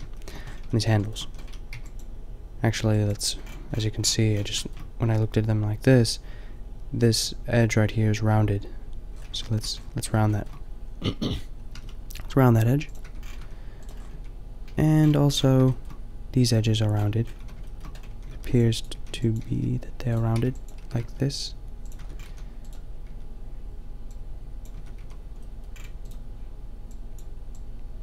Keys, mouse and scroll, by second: 0.6 a, 0.8 a, 0.8 middle click, 1.3 a, 1.7 b, 3.4 b, 9.2 middle click, 9.8 middle click, 11.7 g, 12.9 Tab, 13.3 a, 14.0 middle click, 14.1 Tab, 14.8 a, 15.2 middle click, 17.3-20.8 typing, 18.4 ctrl+r, 18.8-20.0 drag, 22.0 Tab, 22.3 a, 23.1 Tab, 24.7 Tab, 24.9 a, 27.0 click.